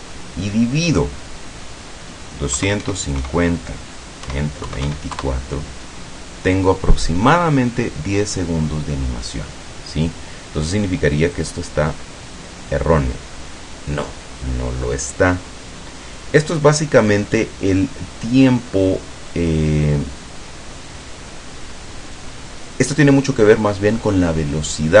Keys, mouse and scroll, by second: 2.6 KP_2, 2.9 KP_5, 3.3 KP_0, 4.8 KP_2, 5.0 KP_4, 5.2 KP_Enter, 11.5 click.